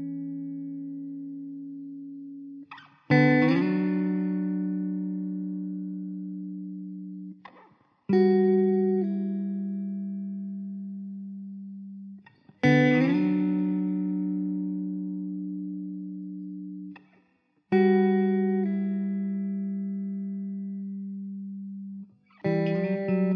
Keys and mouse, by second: 1.1 KP_5, 1.3 Return, 2.0 middle click, 6.8 4, 13.1 alt+w, 13.9 middle click, 15.2 alt+middle click.